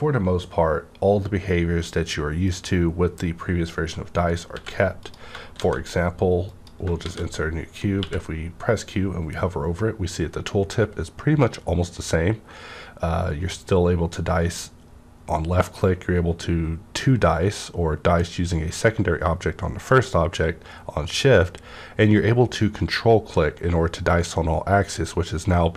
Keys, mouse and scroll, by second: 2.4 right click, 2.4 shift+click, 4.5 x, 5.0 click, 5.6 shift+a, 6.4 click, 7.0 shift+a, 7.9 q.